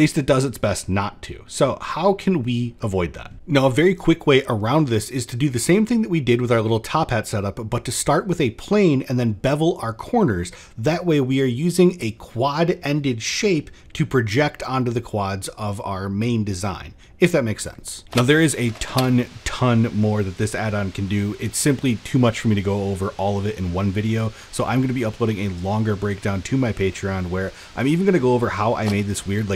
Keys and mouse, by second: 0.5 middle click, 3.3 x, 3.3 Tab, 8.4 middle click, 8.9 ctrl+b, 10.5 click, 11.8 n, 12.7-13.8 drag, 15.2 click, 16.1 middle drag, 16.6 shift+middle drag, 17.1 middle drag, 17.4 shift+middle click.